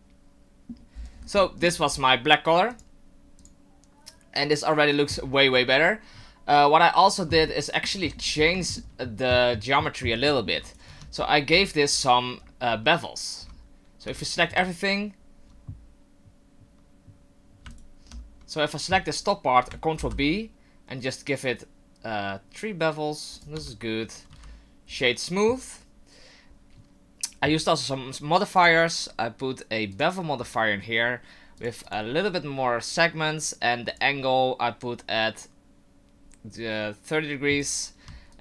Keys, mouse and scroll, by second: 0.9-1.7 scroll down 9, 1.4 middle click, 2.8 click, 3.5 click, 4.4 click, 7.0 click, 7.5 shift+middle click, 8.1-8.6 scroll up 7, 8.6 shift+middle click, 10.2 shift+middle click, 10.6 right click, 10.9 Tab, 11.2 scroll up 2, 11.6 alt+right click, 14.0 a, 17.7 alt+right click, 20.0 ctrl+b, 23.5 Tab, 24.3 w, 26.4 ctrl+z, 28.6 click, 31.8 click, 33.9 click, 38.3 shift+click.